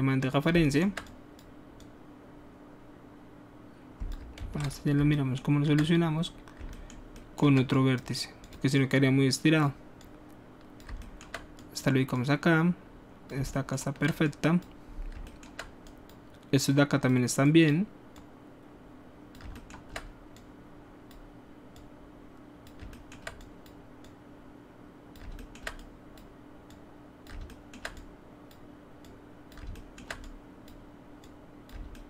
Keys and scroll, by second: 4.4 ctrl+z, 4.9 ctrl+alt+z.